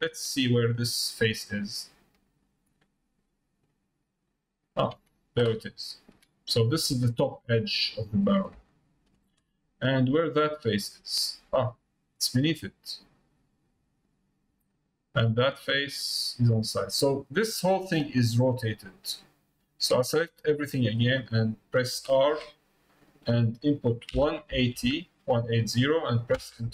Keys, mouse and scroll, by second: 1.7 middle click, 2.6 middle click, 3.2 middle click, 3.7 middle click, 4.2 middle click, 4.7 middle click, 5.8 shift+middle click, 7.1 shift+middle click, 7.6 middle click, 8.7 shift+middle click, 13.7 click, 17.6 middle click, 19.8 click.